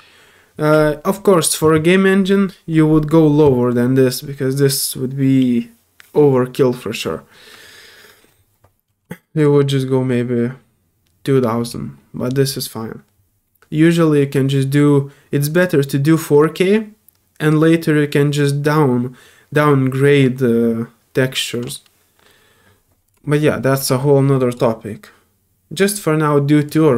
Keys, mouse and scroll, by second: 9.4 click, 11.6 click, 15.5 click, 23.0 click, 24.5 click, 26.6 click.